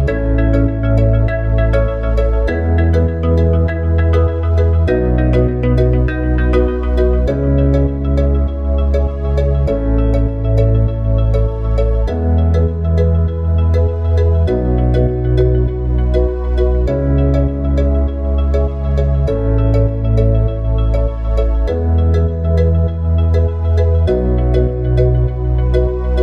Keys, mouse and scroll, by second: 5.4-8.4 middle drag, 14.9 shift+a, 16.8 KP_1, 18.1 KP_3, 20.8 KP_1, 21.9-25.0 middle drag, 25.4 click.